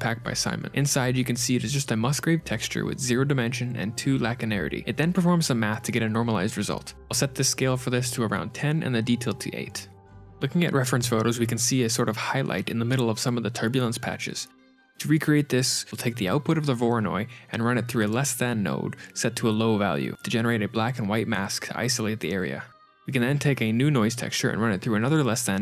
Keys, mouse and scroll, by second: 1.0-1.6 scroll up 2, 6.7 Tab, 7.8 click, 10.0 scroll down 8, 11.4 middle click, 11.9-12.2 scroll down 2, 14.4-15.4 scroll down 6, 15.7 middle click, 16.7 shift+a, 17.3 click, 17.3 scroll up 6, 18.9 middle click, 19.2 click, 20.7 ctrl+shift+click, 22.9-23.3 scroll down 10, 22.9 shift+a, 24.5 click, 24.6 shift+d.